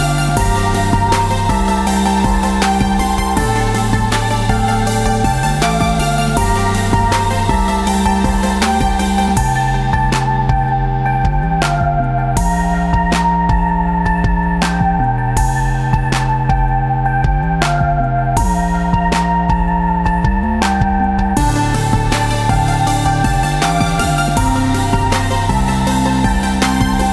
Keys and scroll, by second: 2.6-8.6 typing, 10.7 Tab, 15.1 v, 20.2 Tab, 26.8 ctrl+s.